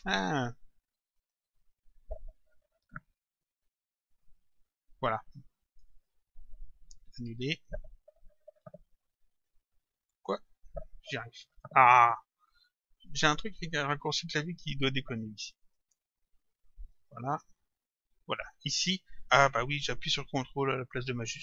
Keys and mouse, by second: 1.2 click, 4.1 click, 7.3 ctrl+z, 10.1 click, 13.0 click, 15.7 click, 17.2 Up.